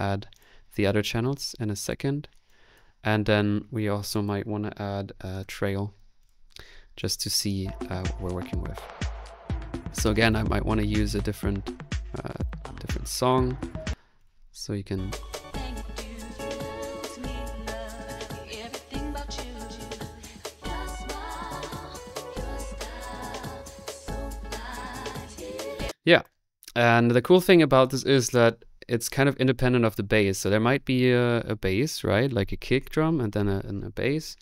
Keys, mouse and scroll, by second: 5.2 typing, 7.8 click, 9.7 click, 10.3 click, 12.4 click, 14.5-15.2 typing, 14.7 click, 15.4-16.5 drag, 25.7 typing.